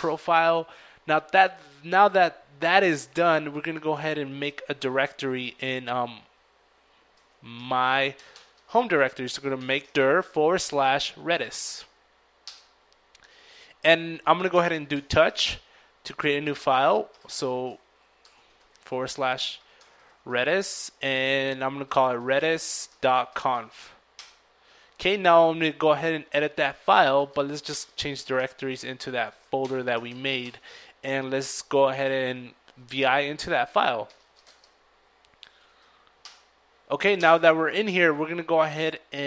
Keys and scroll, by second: 4.8 ctrl+m, 5.2 ctrl+k, 5.3 ctrl+d, 5.8 ctrl+i, 6.0 ctrl+r, 7.2 ctrl+~, 7.5 ctrl+/, 8.6 ctrl+r, 8.9 ctrl+e, 8.9 ctrl+d, 9.0 ctrl+i, 9.1 ctrl+s, 9.3 ctrl+Tab, 10.0 ctrl+Return, 12.0 ctrl+t, 12.1 ctrl+o, 12.2 ctrl+u, 12.5 ctrl+c, 12.7 ctrl+h, 13.9 ctrl+/, 14.9 ctrl+~, 15.2 ctrl+?, 15.6 ctrl+r, 16.2 ctrl+/, 16.3 ctrl+/, 16.3 ctrl+r, 16.4 ctrl+e, 17.5 ctrl+r, 17.6 ctrl+e, 17.8 ctrl+Tab, 19.4 ctrl+r, 19.5 ctrl+e, 19.8 ctrl+d, 19.9 ctrl+i, 20.1 ctrl+s, 20.5 ctrl+., 20.8 ctrl+c, 20.9 ctrl+o, 21.0 ctrl+n, 21.1 ctrl+f, 21.8 ctrl+Return, 24.6 ctrl+c, 24.6 ctrl+d, 24.6 typing, 25.0 ctrl+~, 25.3 ctrl+Return, 26.0 ctrl+c, 26.0 ctrl+d, 26.2 ctrl+space, 26.6 ctrl+r, 26.7 ctrl+e, 26.9 ctrl+Tab, 27.2 Return, 27.5 ctrl+c, 27.7 ctrl+l, 27.8 ctrl+e, 27.9 ctrl+a, 27.9 ctrl+r, 28.0 ctrl+Return, 30.5 ctrl+s, 30.7 $, 31.0 ctrl+u, 31.1 ctrl+d, 31.6 ctrl+o, 31.8 ctrl+space, 32.0 ctrl+i, 33.0 ctrl+space, 33.0 ctrl+r, 33.3 ctrl+Tab, 33.8 ctrl+Return, 34.8 ctrl+i.